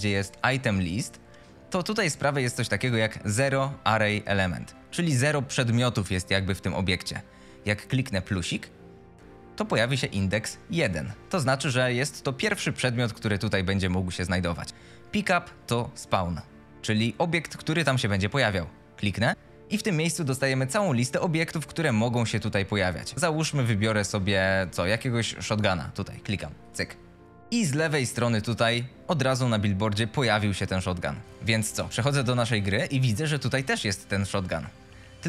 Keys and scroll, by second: 27.7 F22, 31.2 Escape, 34.9 e.